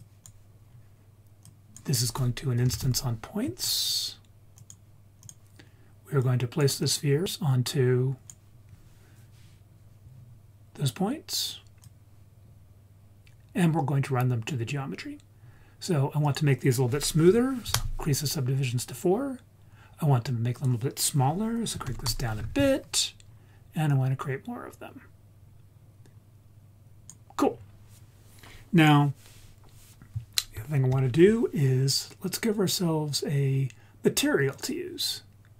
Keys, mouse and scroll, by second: 0.6-1.1 scroll up 1, 1.1 scroll up 1, 1.4-4.6 drag, 5.2 click, 6.1 click, 6.7-8.4 drag, 11.8 click, 15.3-16.2 scroll up 3, 16.2-17.7 drag, 18.7 scroll down 2, 19.6-19.9 scroll up 2, 20.6-22.1 drag, 23.2-23.9 scroll up 3, 23.9-27.2 drag, 27.6-28.8 scroll down 1, 28.8 click, 28.8 scroll down 1, 34.6 click.